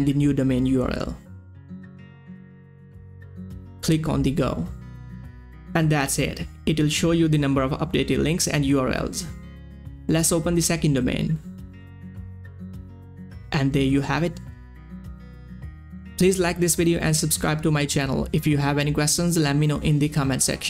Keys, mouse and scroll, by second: 8.0 click, 8.1 scroll down 1, 9.5 click, 11.1-12.0 typing, 12.9-17.1 drag.